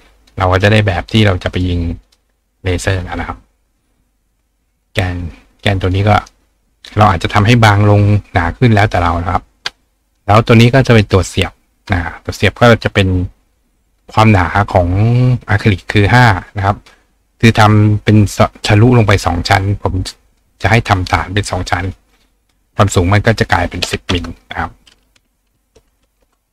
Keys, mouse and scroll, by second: 1.6 click, 2.1 click, 5.9 click, 6.2 right click, 10.4 click, 12.7-14.4 drag, 18.1 click.